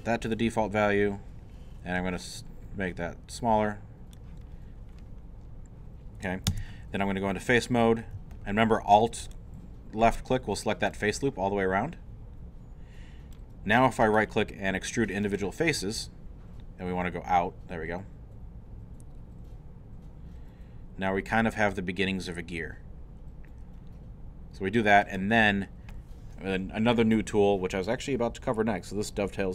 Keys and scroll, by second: 6.5 Tab.